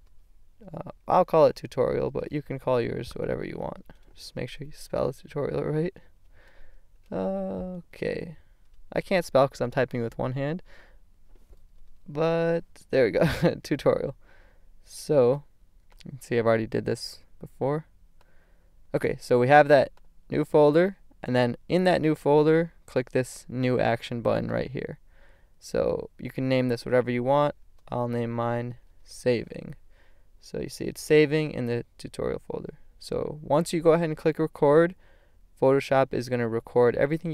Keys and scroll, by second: 0.0-4.6 typing, 5.8 BackSpace, 6.2 i, 6.9 shift+l, 7.9 shift+BackSpace, 11.7 a, 27.3-29.6 typing.